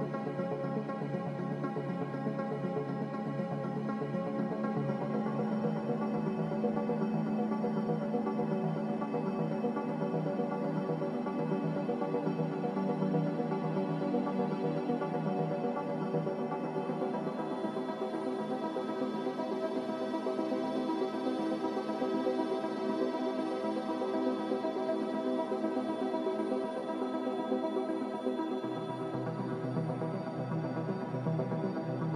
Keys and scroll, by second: 18.2 a, 24.4 z.